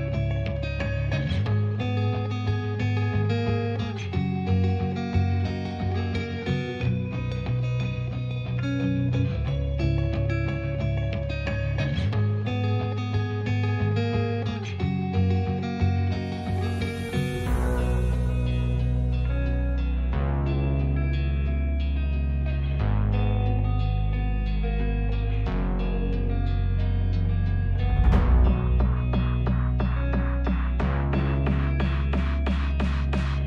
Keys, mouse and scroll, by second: 0.2 click, 2.6-6.5 typing, 3.5 click, 4.6 click, 5.1 click, 5.8 click, 6.4 click, 7.6 click, 8.1 e, 8.5 click, 8.6 s, 9.5 click, 10.3 click, 11.1 Tab, 12.6 click, 14.0 click, 15.4-17.2 drag, 17.6 click, 18.5 click, 20.5 ctrl+z, 21.4-22.5 drag, 23.3 Tab, 24.3 r, 24.8 click, 25.4 r, 27.8 click, 28.1 ctrl+z, 28.4 click, 29.4 click, 29.9 click, 30.2 g, 30.5 middle click, 32.8 click.